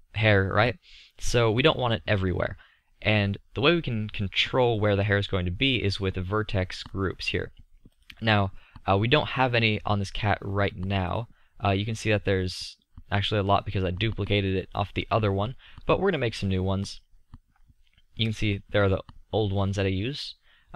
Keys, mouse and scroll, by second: 2.1 middle click, 4.8-6.7 drag, 6.9-9.9 drag, 11.1-14.6 drag, 14.6-16.9 middle drag, 18.6-20.7 middle drag.